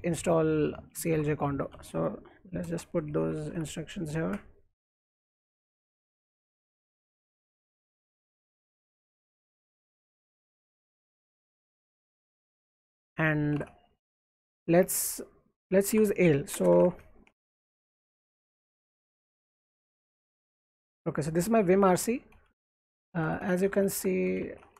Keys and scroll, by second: 1.1 alt+Tab, 2.0-4.0 typing, 4.3 ctrl+shift+v, 4.8 Escape, 5.2-14.8 typing, 15.9 alt+Tab, 16.5-20.0 typing, 18.0 Escape, 21.2 ctrl+d, 21.4 ctrl+d, 21.6 ctrl+d, 23.9-24.7 typing.